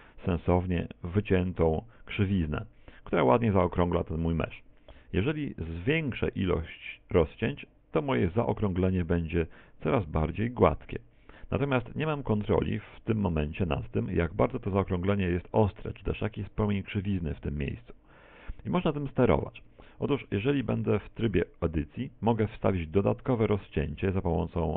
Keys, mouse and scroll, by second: 4.9 shift+middle click, 7.0 click, 8.1 click, 19.7 Tab, 20.3 scroll up 2, 20.7 shift+middle click, 23.0 ctrl+r.